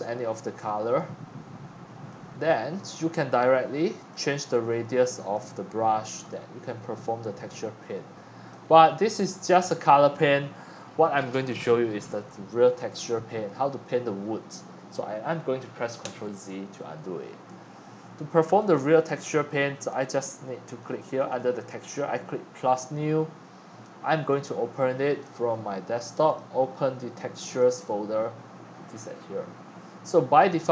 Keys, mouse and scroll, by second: 8.7-10.0 middle drag, 16.0 ctrl+z, 18.7-30.5 drag.